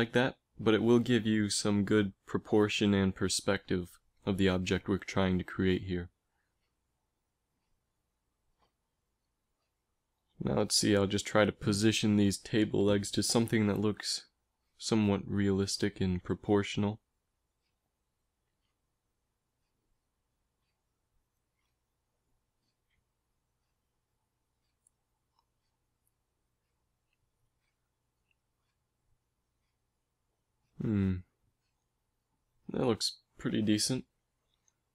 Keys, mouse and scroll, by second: 0.6-2.4 drag, 4.2-6.2 middle drag, 7.7-8.5 scroll up 2, 8.5 scroll up 1, 8.7 KP_1, 10.5 g, 14.0 a, 14.3 z, 14.5 b, 15.1 g, 17.6 a, 18.5 a, 19.0 g, 22.3 z, 23.4 a, 25.9 z, 26.2 b, 27.2 g, 29.9 a, 30.2 z, 33.9-34.9 drag, 34.5 a.